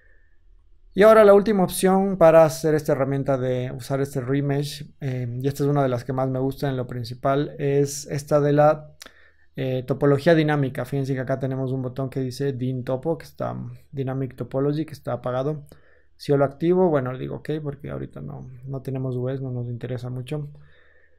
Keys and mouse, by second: 0.5 ctrl+z, 1.1 ctrl+z, 1.8 ctrl+z.